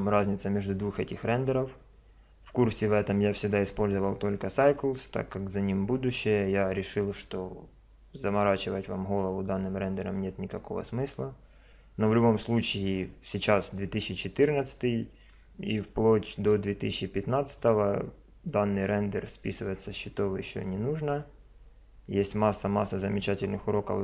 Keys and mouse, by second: 0.1 click, 17.6 click.